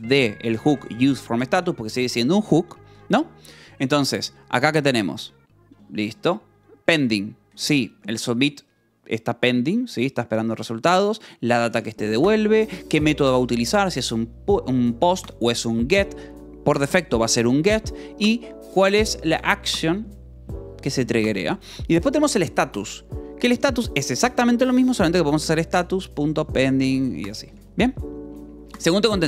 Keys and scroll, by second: 0.6 v, 1.2 e, 2.9 Escape, 5.1 ctrl+s, 6.5-7.4 typing, 7.4 Escape, 8.2 ctrl+s, 9.7 l, 10.8-12.8 typing, 15.9 Escape, 17.9-19.3 typing, 19.4 Escape, 20.5 ctrl+s, 21.0 j, 24.0-27.1 typing, 28.0 ctrl+s, 28.2 k.